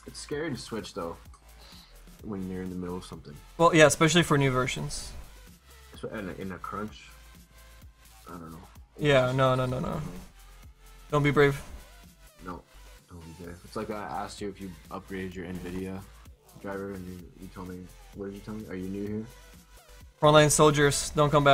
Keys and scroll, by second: 15.6 ctrl+z.